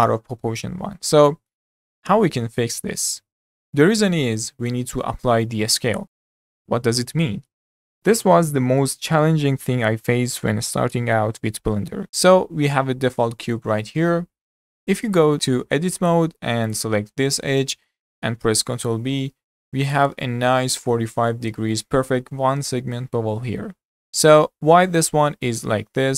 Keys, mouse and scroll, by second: 1.0-3.6 middle drag, 12.0 click, 12.6-13.2 scroll down 3, 13.2-15.3 shift+middle drag, 15.3 click, 15.9 Tab, 16.7 click, 17.5-18.8 middle drag, 18.8 ctrl+b, 20.3-21.9 middle drag, 21.9-23.8 scroll up 4, 23.8 scroll down 3, 24.0-25.6 middle drag, 25.6 ctrl+z.